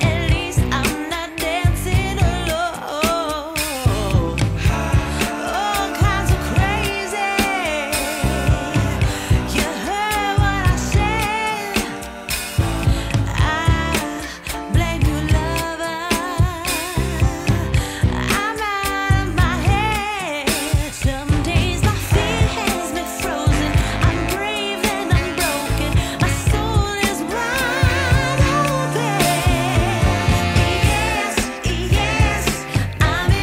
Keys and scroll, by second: 6.7 w, 8.7 e, 16.5 Return, 24.4 Return, 32.7 Delete.